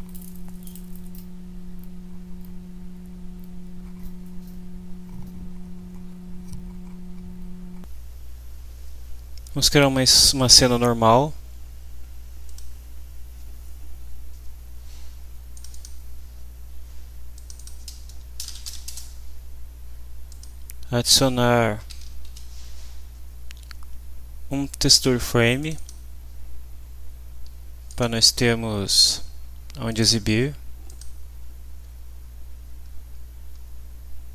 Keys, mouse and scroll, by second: 0.0-1.5 typing, 1.8 click, 2.4 click, 3.4 click, 12.4 click, 15.5 click, 17.4 click, 18.1-19.1 typing, 20.3 click, 21.6-22.7 typing, 25.6 click, 27.9 click, 29.0 click, 29.9 click, 30.9 click, 31.4-32.2 scroll down 2, 32.5-32.8 scroll down 2, 33.2-33.6 scroll up 2.